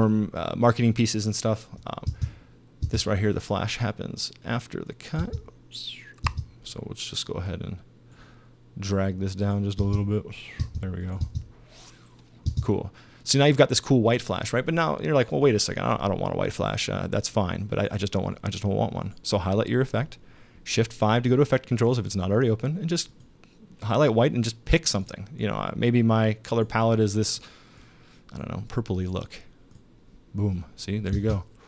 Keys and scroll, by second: 2.1 space, 5.2 space, 9.8 space, 12.5 space, 31.1 space.